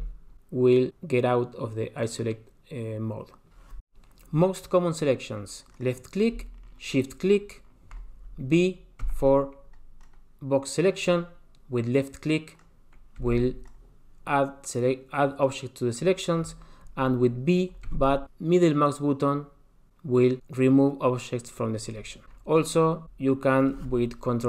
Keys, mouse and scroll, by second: 0.2 KP_Divide, 5.7 click, 6.9 shift+click, 9.0 b, 13.2 b, 17.8 b, 23.0 click.